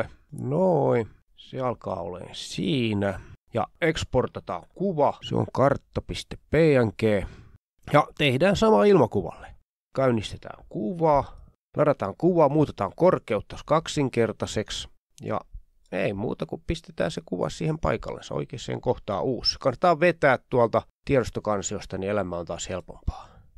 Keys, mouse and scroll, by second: 0.0 Right, 0.1 Right, 0.2 Left, 0.6-2.7 ctrl+scroll down 8, 2.9 click, 3.6 click, 4.5 End, 4.6 Left, 4.7 Left, 4.7 Left, 4.8 Left, 5.2-6.0 typing, 6.3 Return, 7.9 click, 10.4 click, 10.8 click, 11.1 click, 11.9 click, 12.5 click, 12.5 scroll up 2, 13.2 click, 13.8 click, 14.7 click, 15.2-16.2 typing, 17.9 click, 18.0 click, 19.2 click, 19.8 click, 20.1 click, 22.3 click, 22.6 ctrl+scroll down 1.